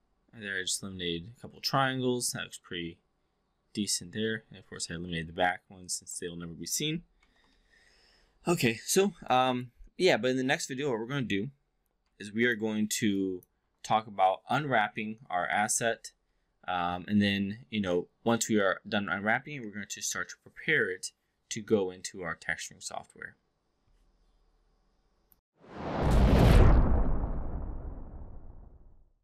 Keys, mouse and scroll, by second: 7.0 shift+i, 8.9 alt+middle click, 9.3-9.6 alt+drag, 9.8 5, 11.9 4, 12.3 click, 13.1-13.5 alt+drag.